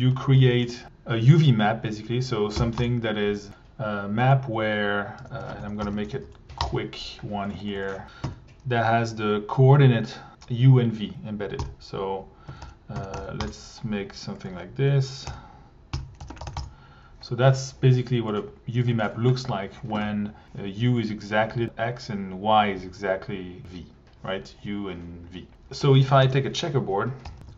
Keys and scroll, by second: 0.0-0.9 typing, 2.6 Down, 2.8 Return, 5.2-6.5 typing, 6.6 Return, 8.2 x, 11.6-13.8 typing, 15.3-17.0 typing, 26.2 Tab, 26.5 c, 27.2 j, 27.4 Down.